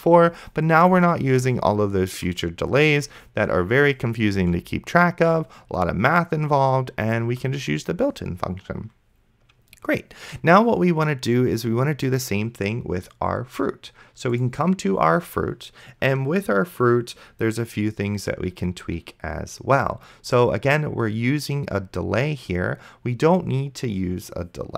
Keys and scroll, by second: 1.5 space, 4.6 space.